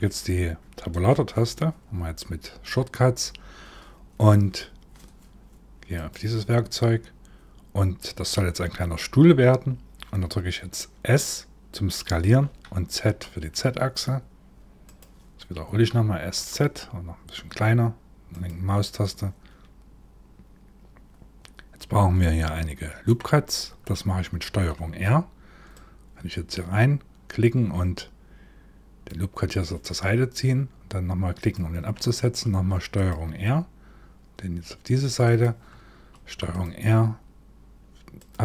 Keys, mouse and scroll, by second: 0.7 Tab, 5.6 click, 12.0 s, 15.3 s, 21.8 middle click, 24.0 ctrl+r, 32.0 ctrl+r, 35.7 ctrl+r.